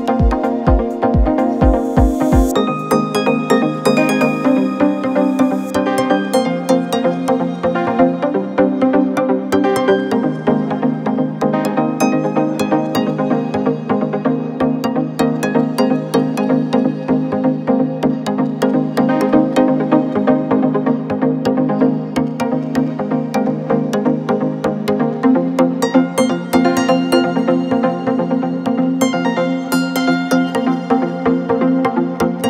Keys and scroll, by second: 5.9 Delete, 6.6 ], 8.3 ], 10.3 ], 19.5 4.